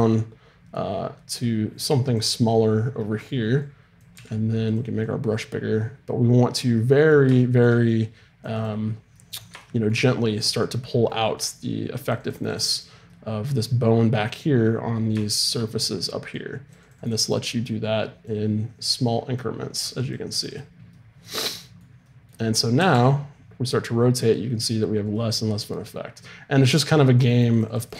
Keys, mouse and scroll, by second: 0.1-3.0 drag, 3.6-6.7 drag, 4.1 f, 7.9-15.9 drag, 7.9-15.9 middle drag, 16.4-22.5 drag, 16.4-20.0 middle drag, 21.1 middle click, 22.8 r, 27.3-27.9 drag.